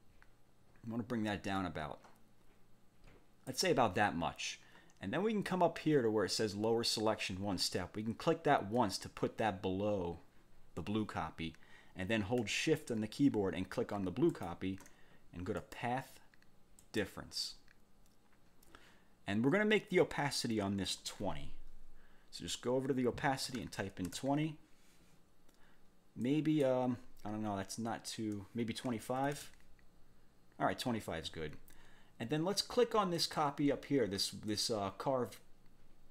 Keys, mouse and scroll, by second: 8.8 click, 14.3 shift+click, 15.6 click, 16.8 click, 20.6 click, 23.2-24.1 typing, 26.2 click, 28.9 2, 29.2 5, 29.4 Return, 33.2 click, 34.5-36.1 drag.